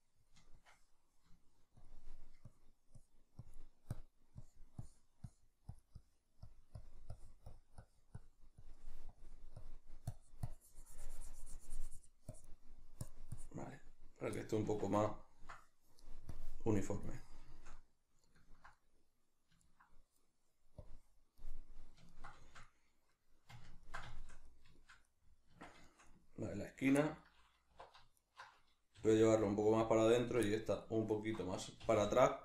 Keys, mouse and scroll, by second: 14.3-16.3 middle drag, 14.7 b, 14.7 Tab, 16.3-17.5 drag, 17.5-20.8 shift+middle drag, 20.8 click, 21.4-26.7 middle drag, 25.5 Tab, 26.7 alt+right click, 27.0-28.2 middle drag, 27.7 2, 28.2 alt+right click, 28.9 g, 29.9 click, 30.2 alt+right click, 30.5 middle click, 31.1 alt+right click, 31.8 g.